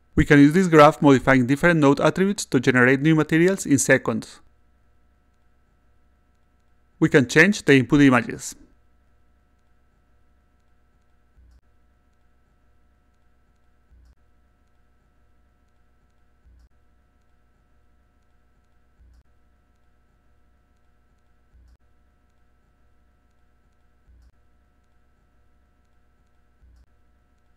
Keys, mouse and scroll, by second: 1.4 click, 3.1 click, 4.3 click, 7.6 click, 8.9 click, 10.4 click, 11.7-12.9 drag, 16.4-17.4 drag, 20.1-21.1 drag, 22.6 click, 25.0-26.1 drag, 27.4 click.